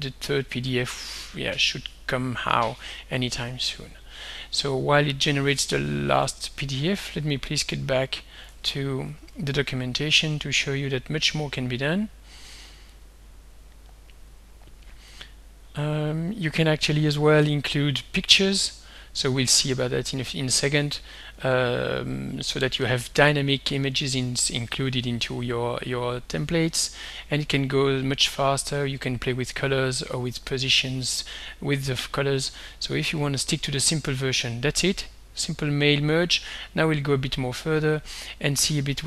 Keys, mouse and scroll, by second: 6.3 alt+Tab, 8.3 alt+click, 8.6 alt+Tab, 9.2 alt+Tab, 13.0 click, 14.3 click, 16.0-16.8 scroll down 2, 16.8-17.3 scroll down 1, 17.6 scroll down 2, 18.3-19.0 scroll down 2, 26.4-26.8 scroll down 2, 28.7 scroll down 2, 29.7 scroll up 2.